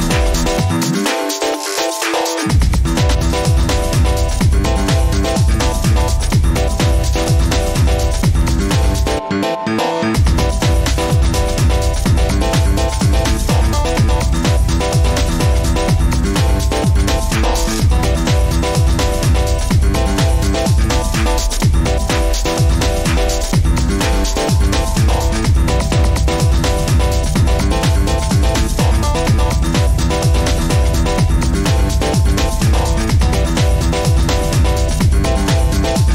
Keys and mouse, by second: 4.3-6.4 middle drag, 15.7-16.3 middle drag, 16.4 middle click, 16.7 Tab, 18.2 click, 19.5 middle drag, 19.9 middle click, 21.1 ctrl+s, 21.8 Tab, 22.7 middle click, 23.9 shift+middle click, 24.6-26.1 middle drag, 26.9 ctrl+r.